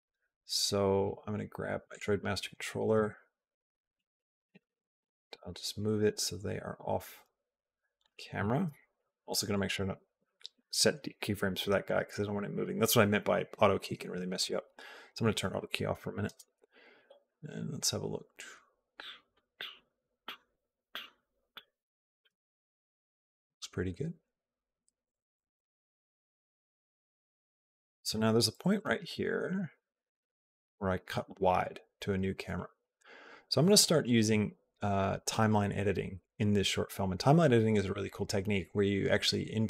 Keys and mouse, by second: 1.7 click, 2.7 g, 4.2 g, 9.1 click, 9.3 click, 10.4 Delete, 14.2 click, 16.1 space, 22.3 click, 22.3 space, 22.7-27.7 drag, 28.6 Left, 28.7 Left, 28.9 Left, 29.1 Left, 29.4 Right, 29.6 Right, 30.2 Left, 30.5 Right.